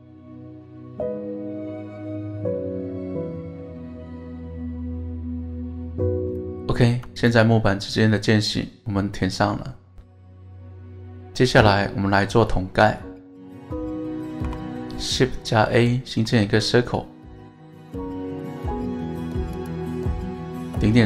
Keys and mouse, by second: 2.6 shift+click, 2.8 middle click, 3.7 middle click, 4.0-5.8 middle drag, 6.4 middle click, 7.1 Tab, 7.2 click, 7.7-13.5 middle drag, 14.4 KP_1, 16.0 shift+a.